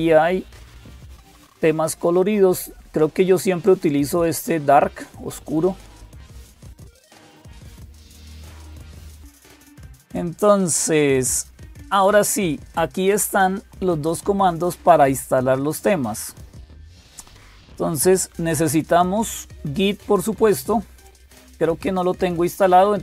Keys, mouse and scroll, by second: 0.0-23.0 typing, 19.2 click, 20.8 click.